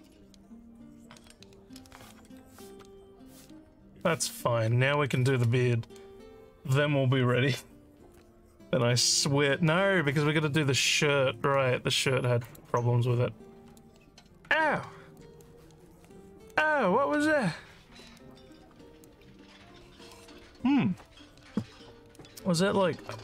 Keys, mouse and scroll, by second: 10.4 scroll down 2, 12.5 click.